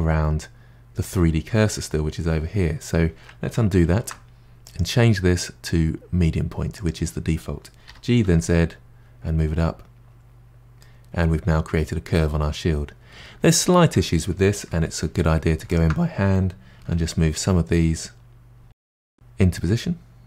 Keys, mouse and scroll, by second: 3.8 ctrl+z, 4.6-7.6 drag, 7.9 g, 10.8-13.8 middle drag, 15.1 2, 15.7 alt+click, 16.7 g, 20.0 middle click.